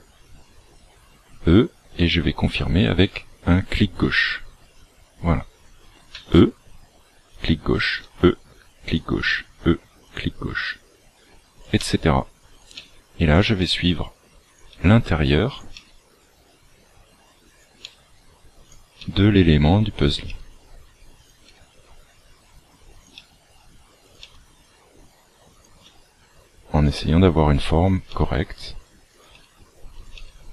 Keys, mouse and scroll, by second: 6.1 e, 7.8 e, 9.2 e, 10.6 e, 12.7 e, 13.5 e, 15.7 e, 19.0 e, 21.4 e, 23.1 e, 25.8 e, 26.8 e, 29.3 e, 30.1 e.